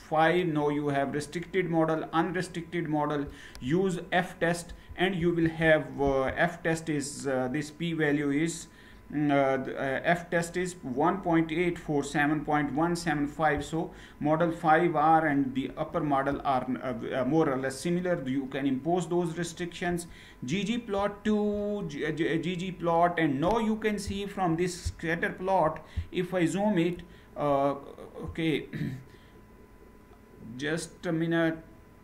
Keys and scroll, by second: 4.8 ctrl+Return, 20.7 ctrl+Return.